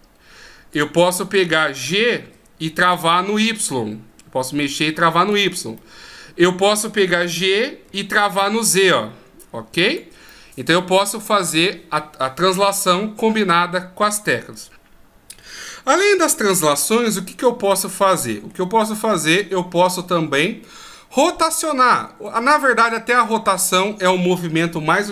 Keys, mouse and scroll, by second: 2.2 g, 5.8 middle click, 7.2 g, 10.3 middle click, 17.7 middle click, 22.3 right click.